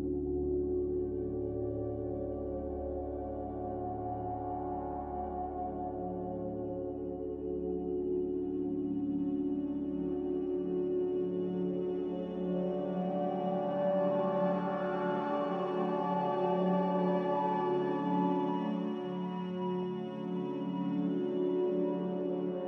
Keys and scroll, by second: 7.5 q, 8.1 ctrl+j, 11.5 q, 16.0 q.